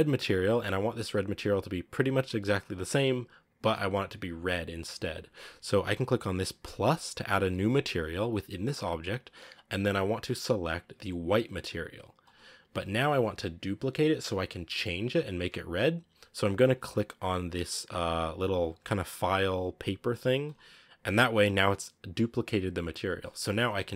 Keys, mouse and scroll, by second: 7.4-23.9 drag.